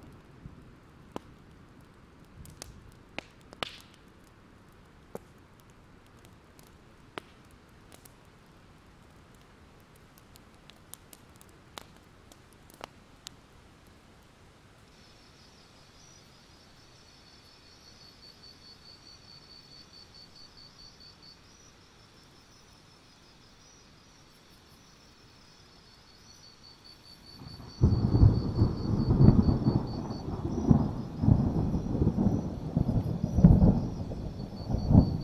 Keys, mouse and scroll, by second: 1.3 click, 2.7-3.4 scroll down 1, 3.4 click, 5.3 alt+scroll up 1, 6.4-10.7 drag, 10.8 ctrl+z, 11.3-16.5 drag, 16.7-17.2 ctrl+scroll up 2, 17.8-20.2 drag, 20.2-20.7 alt+scroll down 2, 20.7-21.7 ctrl+scroll up 1, 21.7-25.8 drag, 26.0 alt+scroll down 1, 26.2 alt+scroll up 1, 26.5 alt+scroll down 2, 26.8 alt+scroll up 1, 27.3 click, 27.8 scroll down 1, 28.5 scroll down 1, 29.2 alt+click, 30.0 shift+click, 30.8-31.3 scroll down 1, 31.3-32.6 drag, 32.9-34.0 alt+scroll down 2, 34.3-35.2 alt+drag.